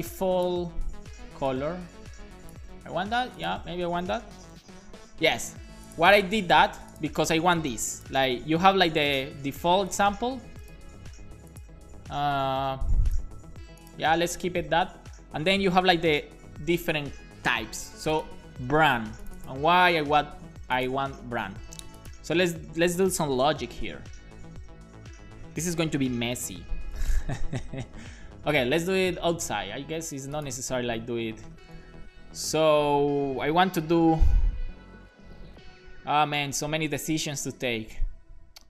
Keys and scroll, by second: 0.7 super+x, 2.7 super+v, 2.9 super+s, 4.2 alt+shift+f, 4.5 super+s, 23.3 BackSpace, 23.6 shift+[, 23.9 Return, 24.5 Down, 28.1 super+z, 29.1 super+z, 29.7 super+z, 30.9-31.7 typing.